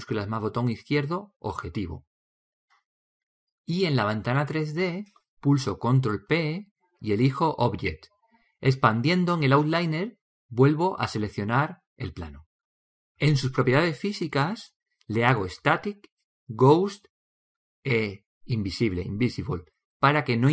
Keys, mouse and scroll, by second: 1.3-3.0 shift+drag, 6.3 ctrl+p, 12.2-15.1 drag, 15.4-17.2 drag, 17.4-19.2 drag, 19.6-20.5 drag.